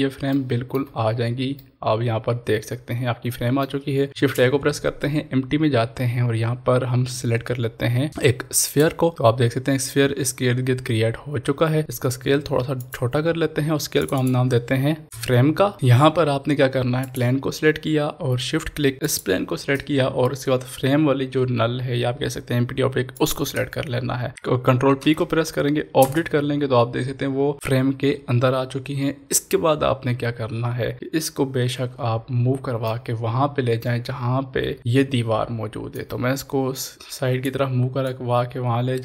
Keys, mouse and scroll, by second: 0.3 shift+middle click, 0.4 shift+middle click, 1.1 scroll up 1, 1.5-4.1 middle drag, 4.1 shift+a, 8.7 click, 12.8 click, 15.7-17.0 middle drag, 17.0 click, 19.2 shift+click, 23.4 shift+click, 25.1 ctrl+p, 30.8 Return, 30.8-31.2 scroll down 1, 32.8 middle click, 33.7-34.1 scroll down 1, 34.8-35.9 shift+middle drag, 35.9-39.0 drag.